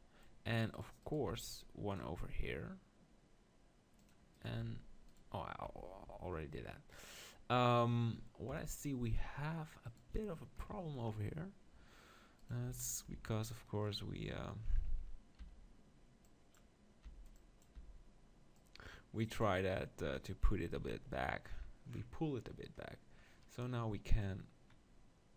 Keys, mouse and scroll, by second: 0.8-2.0 middle drag, 0.8-2.8 right drag, 1.3 ctrl+r, 4.3-8.8 drag, 4.8 ctrl+r, 5.7 Tab, 6.0 Tab, 8.5 KP_7, 9.8-11.8 drag, 12.4-14.3 drag, 12.7 z, 13.1 b, 15.4 b, 17.0 b, 17.7 b, 20.8 z, 24.2-25.3 drag.